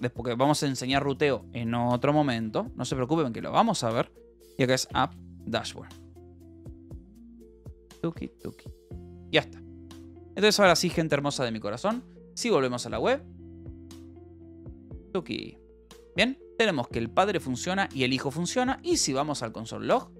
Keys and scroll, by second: 0.6 o, 3.0 BackSpace, 4.6-8.0 typing, 9.2 ctrl+s.